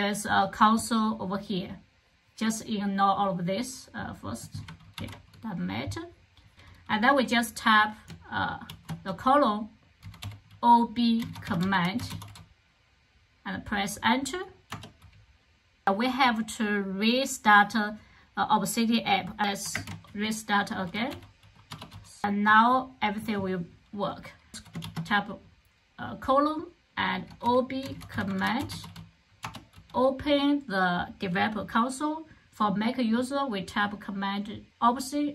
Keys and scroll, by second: 4.9 super+k, 8.6 shift+;, 9.9-12.5 typing, 14.6 Return, 19.6 alt+space, 20.9-21.3 typing, 21.6 Return, 24.5 typing, 26.9-29.1 typing, 29.3 Return.